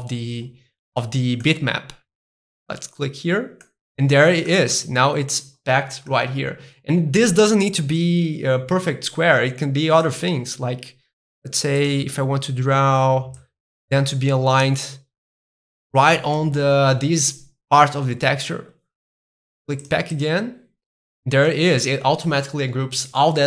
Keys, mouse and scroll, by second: 2.4-3.6 drag, 3.6-5.7 middle drag, 6.1-8.1 middle drag, 10.1-11.8 middle drag, 11.8-15.4 drag, 19.8-21.1 drag, 21.1-23.2 middle drag.